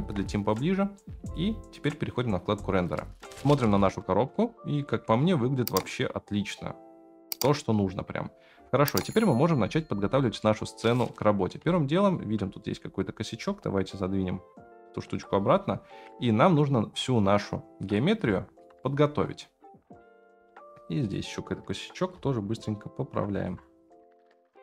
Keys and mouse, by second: 0.0 KP_Decimal, 2.8-3.2 middle drag, 3.7-4.3 middle drag, 5.2-7.8 middle drag, 9.2 middle click, 9.8 middle click, 10.4-11.5 middle drag, 11.8 shift+middle click, 12.6 click, 13.3 g, 16.1-16.9 middle drag, 17.9-18.2 drag, 18.3 shift+middle drag, 18.8 middle click, 20.4 F9, 21.0 click, 22.1-23.5 shift+drag, 24.0 F9.